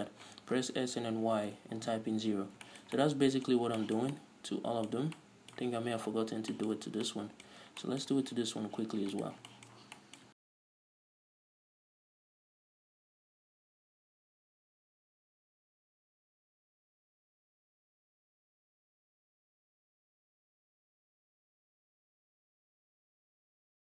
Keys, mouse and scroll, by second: 0.7 s, 2.2 Return, 2.7 scroll down 1, 2.9 shift+middle click, 3.2 middle click, 3.8 scroll up 1, 4.0 shift+middle click, 4.4 middle click, 6.5-9.4 shift+middle drag, 6.5-7.3 scroll up 2, 7.7 scroll up 1, 8.6 z, 9.4 right click, 9.5 shift+middle click, 10.4 shift+right click, 10.4 scroll down 2, 10.5 shift+middle click, 10.7 scroll up 1, 10.8 z, 11.3 shift+right click, 11.4 s, 11.7 Return, 11.8 shift+middle click, 11.9 scroll up 1, 12.0 shift+right click, 12.4-12.7 scroll down 1, 12.7 shift+middle click, 12.8 s, 13.2 Return, 13.3 shift+middle click, 13.8 ctrl+right click, 13.9 shift+middle click, 14.4 s, 14.6 Return, 14.9-16.7 shift+middle drag, 15.1 z, 15.5-15.8 scroll down 2, 15.8-16.3 scroll up 4, 16.0 a, 16.8 middle click, 16.9 shift+right click, 17.0 scroll down 2, 17.1 middle click, 17.3 scroll up 2, 17.7 shift+right click, 17.7-22.9 middle drag, 17.9 s, 18.3 Return, 18.9 scroll down 2, 19.1 scroll up 2, 19.7 ctrl+z, 20.3 ctrl+shift+z, 21.2 scroll up 2, 21.4 s, 21.8 Return, 21.9-22.4 scroll down 4, 22.4 scroll up 2, 22.9 right click, 23.0 middle click, 23.3 scroll down 2, 23.3 shift+middle click, 23.7 shift+right click, 23.8-23.9 shift+middle drag.